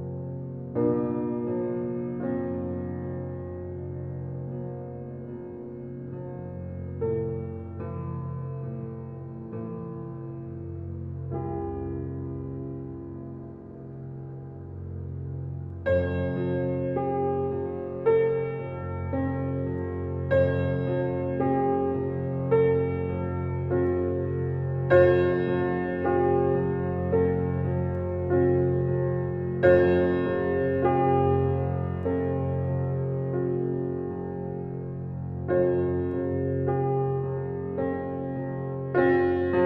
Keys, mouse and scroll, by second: 2.5-11.0 drag, 13.3 click, 14.6-15.9 ctrl+alt+scroll up 2, 15.9-16.6 ctrl+alt+scroll up 1, 17.7 ctrl+alt+scroll down 1, 19.2 ctrl+alt+scroll up 1, 21.1 ctrl+alt+scroll down 1, 24.2-25.5 ctrl+alt+scroll up 1, 25.5 click, 29.4 click, 36.4-39.6 drag.